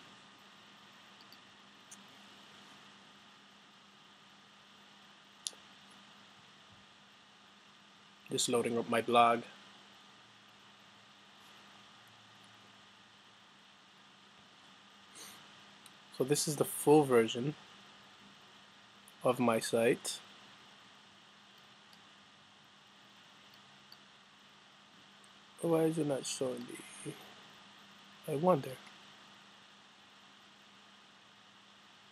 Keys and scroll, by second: 0.0-0.3 typing.